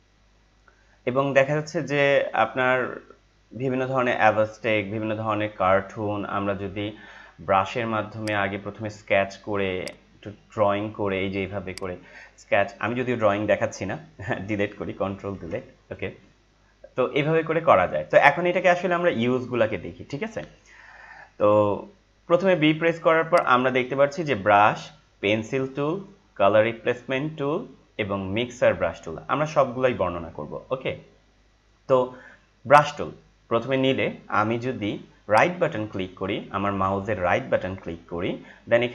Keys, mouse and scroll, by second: 4.2 scroll down 1, 8.2-15.0 drag, 15.1 ctrl+Num_Lock, 15.1 click, 15.3 ctrl+Delete, 23.3 right click, 32.6 click, 35.3 right click.